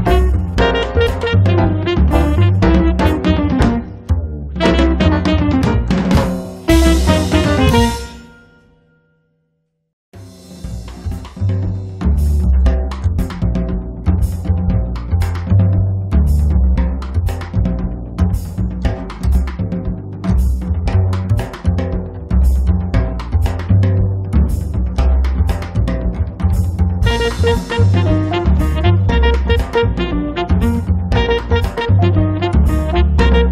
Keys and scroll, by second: 0.1 space, 4.4 m, 8.6 space, 9.0 Escape, 12.2 m, 19.7 r, 21.8 p, 24.1 f, 26.2 5, 26.6 Return, 27.3 p, 30.8 space.